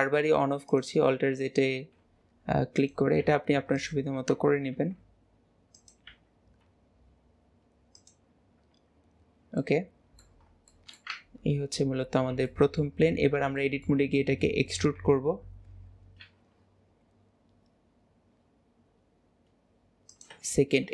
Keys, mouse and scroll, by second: 10.5 middle click, 10.8-12.5 middle drag, 13.2 middle click, 14.8-20.9 middle drag, 15.8 scroll down 2.